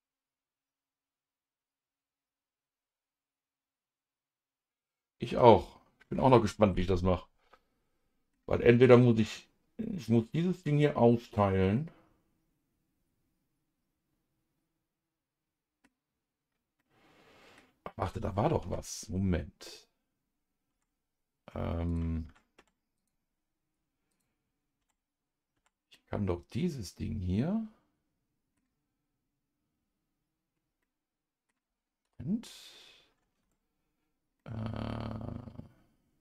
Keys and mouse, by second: 5.5-8.3 middle drag, 11.7-15.8 middle drag, 16.8 middle click, 20.7 Tab, 21.9 click, 22.2 Tab, 22.6 Tab, 23.0 click, 25.5 Tab, 25.8 Tab, 25.9-28.6 middle drag, 30.8 middle click, 32.0 KP_Divide, 33.4 Tab, 34.4-36.2 middle drag.